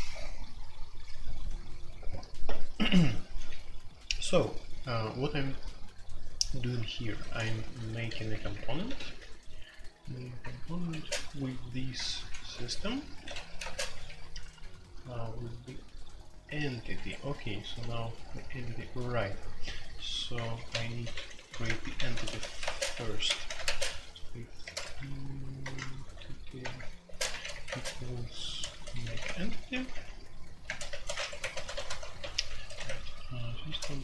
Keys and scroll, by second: 7.2-9.0 typing, 10.4-10.9 typing, 12.2-13.6 typing, 16.9 Escape, 17.2-34.0 typing, 21.6 Return, 21.8 Escape, 26.6 Return.